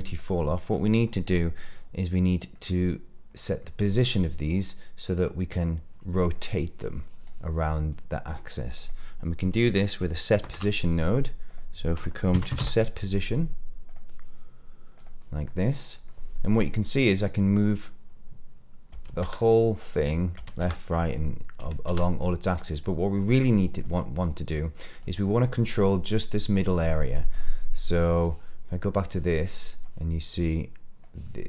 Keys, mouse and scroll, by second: 0.1 click, 0.3-0.7 drag, 1.2-2.6 middle drag, 3.3 middle click, 3.9-6.3 middle drag, 7.5-8.3 middle drag, 8.7 click, 10.3 shift+a, 15.4 middle click, 17.1-18.8 drag, 19.0 ctrl+z, 19.4 click, 20.4 ctrl+z, 20.8 click, 21.7 ctrl+z, 22.1 middle click, 23.7 click, 24.5 drag, 25.1-25.7 middle drag, 27.1 middle drag, 28.2-29.0 drag, 29.2-29.8 middle drag, 30.9 click.